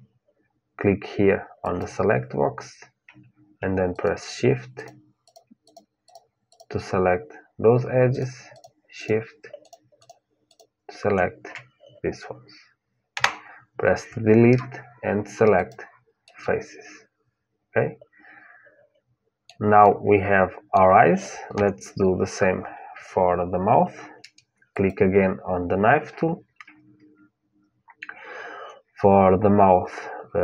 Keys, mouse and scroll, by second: 1.4-12.9 drag, 12.9 Delete, 16.0-18.0 middle drag, 19.6-21.8 middle drag, 21.3 KP_1, 24.5-26.5 drag.